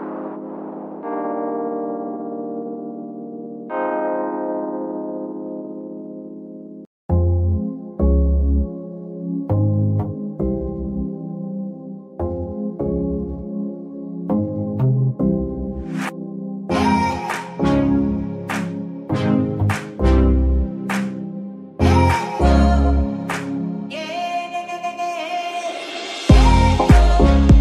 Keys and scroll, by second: 0.0 Escape, 2.4 ctrl+Tab, 9.5 r, 10.7 Escape, 14.1 Escape, 14.8 r, 16.4 Escape, 17.1 r, 17.7 Escape, 18.7 r, 19.4 Escape.